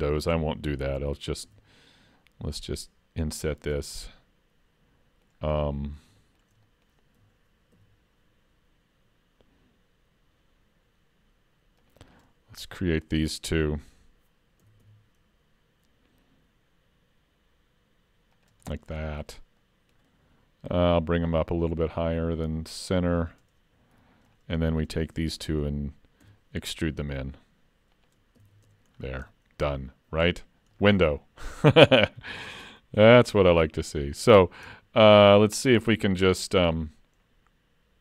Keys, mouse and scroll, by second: 1.5 i, 4.0 middle click, 6.2 shift+middle click, 6.6 middle click, 7.8 ctrl+r, 12.6-13.0 scroll up 2, 12.9 middle click, 14.7 s, 18.7 middle click, 19.1-19.5 scroll down 3, 19.6 middle click, 21.0 click, 24.0 3, 24.3 click, 24.8 shift+click, 25.1 middle click, 26.3 e, 28.5 alt+a, 28.7 Tab, 29.0-29.3 scroll down 4, 29.3 middle click, 30.4-30.7 scroll up 2, 30.8 middle click, 31.8 ctrl+scroll up 1, 31.9 ctrl+middle click, 33.1 shift+middle click, 33.8 click, 34.7 Tab, 36.7 l.